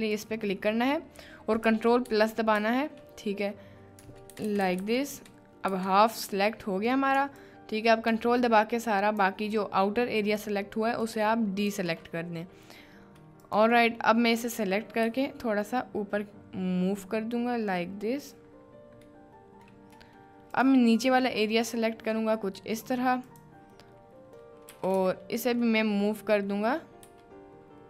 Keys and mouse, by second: 1.2 middle click, 2.0 ctrl+KP_Add, 25.1 shift+middle click, 27.0 g.